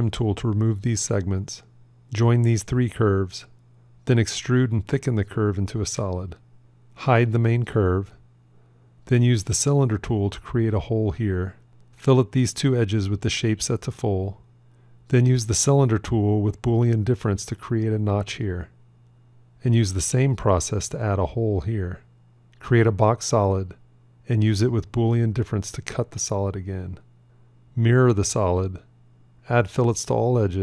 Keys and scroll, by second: 2.4 j, 3.3 e, 5.0 Tab, 18.8 q, 21.9 q, 27.7 alt+x.